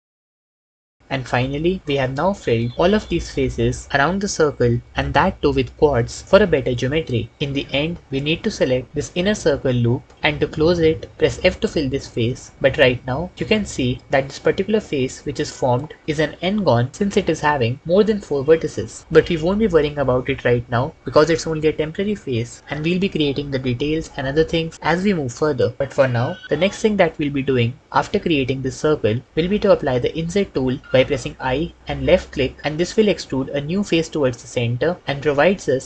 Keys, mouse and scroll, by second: 0.2 f, 1.1 f, 6.3 click, 11.1 f, 14.6 shift+middle click.